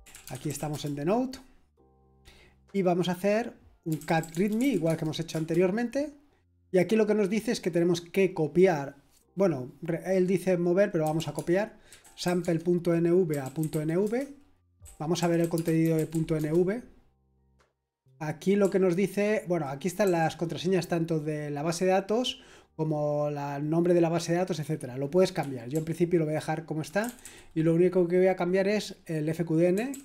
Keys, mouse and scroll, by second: 0.0-1.0 typing, 3.6-5.3 typing, 10.8-17.2 typing, 18.6-20.0 typing, 25.4-27.2 typing, 29.7-30.0 typing.